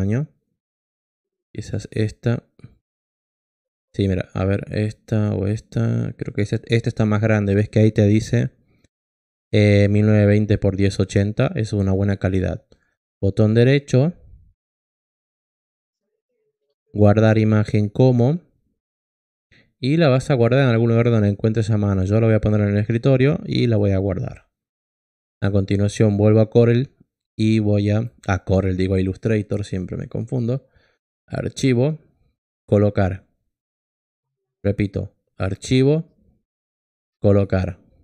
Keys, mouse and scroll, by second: 5.1 click, 17.6 click, 30.0 click.